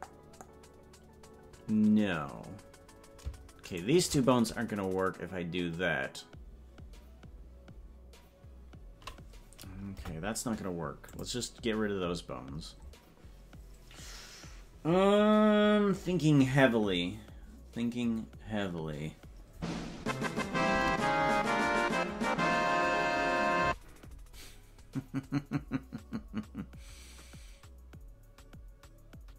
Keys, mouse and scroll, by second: 21.3 Tab.